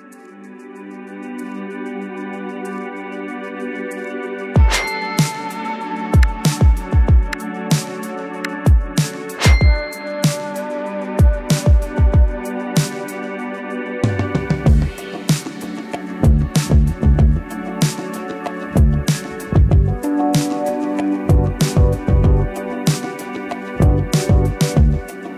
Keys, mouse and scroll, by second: 4.5-13.1 typing, 16.4 drag.